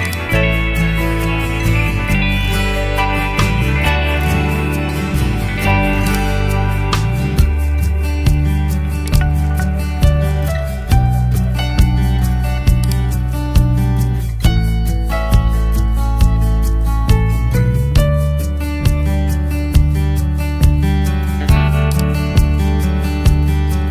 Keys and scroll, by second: 0.7 2, 1.0 0, 19.9 ctrl+z.